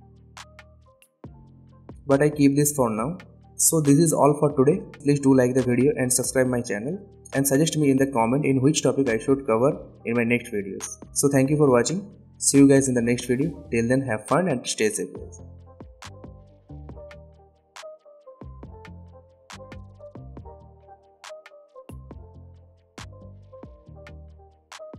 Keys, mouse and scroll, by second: 0.0-3.8 drag, 5.3 alt+scroll up 1, 6.0 click, 8.0-8.3 alt+scroll down 2, 8.3 click, 9.4-12.1 drag, 12.4 n, 13.1-13.6 click, 13.4 space.